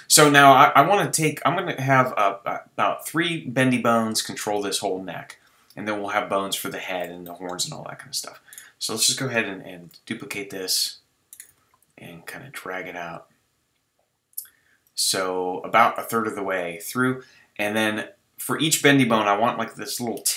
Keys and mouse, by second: 1.4 right drag, 7.2-8.5 middle drag, 9.7 shift+d, 10.7 click, 11.5 g, 12.9 click, 15.9 g, 16.8-19.1 drag.